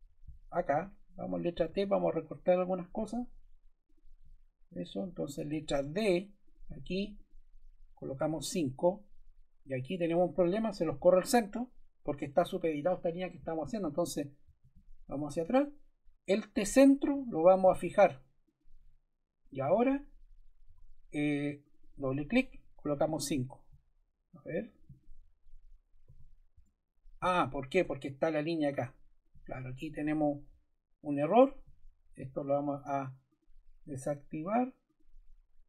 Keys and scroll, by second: 1.6 t, 5.4 d, 8.1 5, 8.3 Return, 13.8 super+z, 14.5 super+z, 20.6 Escape, 22.7 5, 23.0 Return, 26.0 5, 26.5 Return, 27.6 Escape.